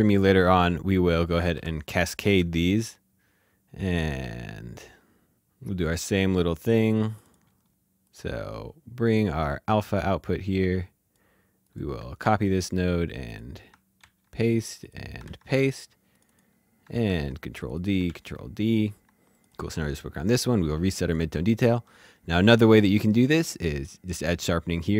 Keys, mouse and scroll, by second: 1.0 p, 1.1 p, 2.9 click, 8.0 click, 12.2 ctrl+c, 13.1 click, 14.0 ctrl+v, 14.7 click, 15.2 ctrl+v, 16.1 click, 17.0 ctrl+d, 17.6 click, 18.0 ctrl+d, 19.3 click, 23.5 click.